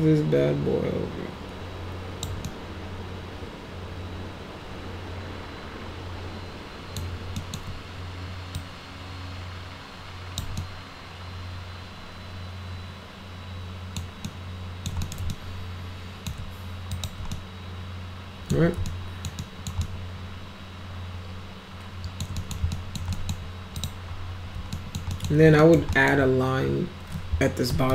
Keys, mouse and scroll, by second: 2.5-7.0 alt+middle drag, 7.4 alt+middle click, 8.6-10.4 drag, 10.6-14.0 alt+middle drag, 14.3 alt+middle click, 15.0 middle click, 15.3 alt+middle click, 16.9 click, 17.3-18.5 alt+middle drag, 18.9 alt+middle click, 19.4 alt+middle click, 19.8-22.2 alt+middle drag, 22.4 middle click, 22.7 alt+middle click, 23.1 middle click, 23.8 click, 24.8 alt+middle click, 25.1 alt+middle click, 25.6 middle click, 25.9 alt+middle click, 27.7 f.